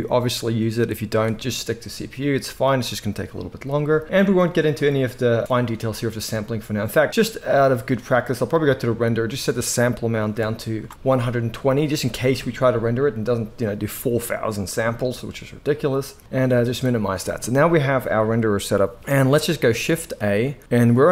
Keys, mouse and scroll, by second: 20.2 shift+a.